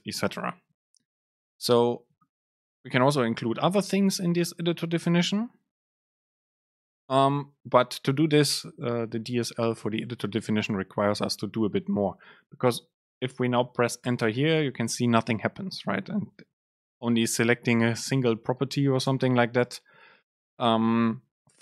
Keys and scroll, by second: 8.5 shift+Left, 9.4 shift+Right, 12.9 Right, 13.5 Up, 13.8 End, 14.3 Return, 16.7 super+space, 19.2 shift+Left.